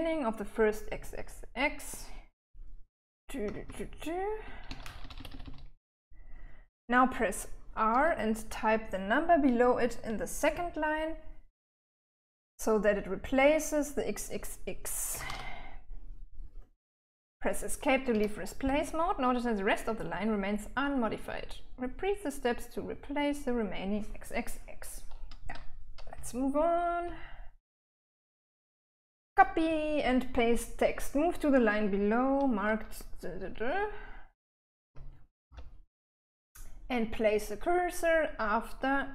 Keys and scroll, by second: 2.9-5.7 typing, 7.0-8.4 typing, 15.2-16.0 typing, 18.4 Escape, 26.4-29.1 typing, 34.8 j, 35.1 j, 35.8 k.